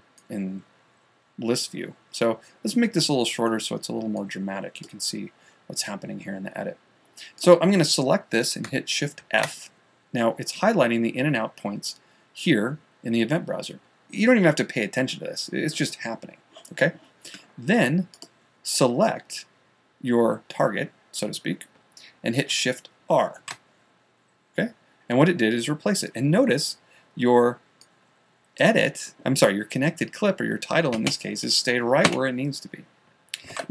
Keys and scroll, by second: 9.7 shift+f, 23.8 shift+r.